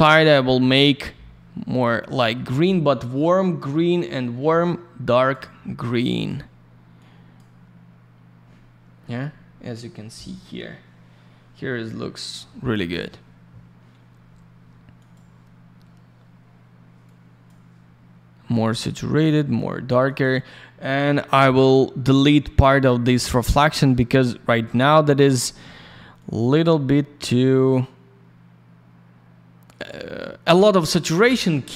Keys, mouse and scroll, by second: 0.6 click, 5.9 click, 6.9 click, 9.5 scroll up 1, 10.1 scroll down 1, 14.9 click, 15.1 click, 17.0 click, 19.2 click, 20.0 click, 20.2 click, 24.8 click, 26.1 click.